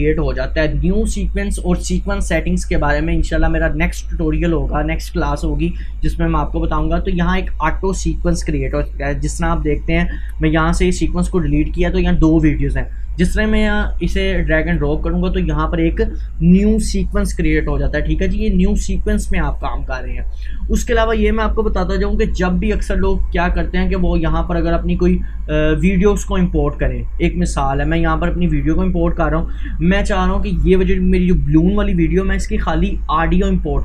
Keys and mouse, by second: 23.5 Delete, 28.0-33.8 drag.